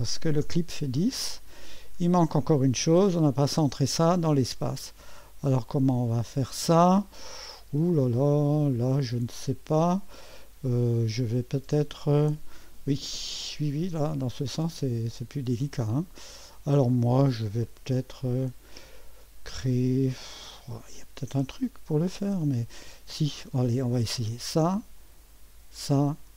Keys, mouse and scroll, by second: 0.4 Return, 2.2-2.9 scroll down 1, 4.6-8.7 drag, 5.3 typing, 9.1-10.6 scroll up 1, 15.5-17.9 scroll up 1, 18.0-19.0 scroll down 2, 19.0-20.0 scroll up 2, 20.0-22.9 scroll down 2, 24.3 click, 25.7 click.